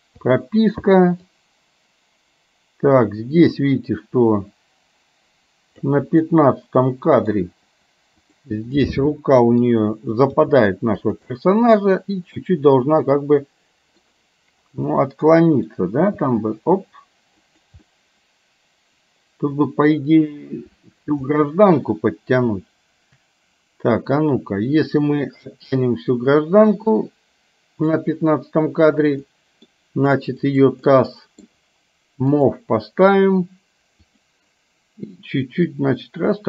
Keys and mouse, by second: 0.2 i, 1.4-6.1 drag, 6.3-7.4 middle drag, 8.8 middle click, 10.4 g, 11.3-14.1 middle drag, 15.1 middle click, 16.2 g, 17.9-21.2 middle drag, 25.6-28.1 drag, 29.3 middle click, 30.6 click, 31.1 middle click, 32.4 click, 35.8-36.4 drag.